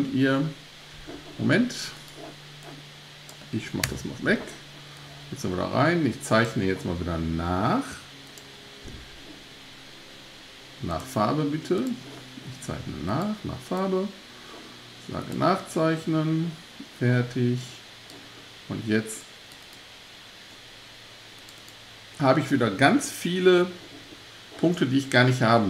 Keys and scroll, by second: 3.9 BackSpace.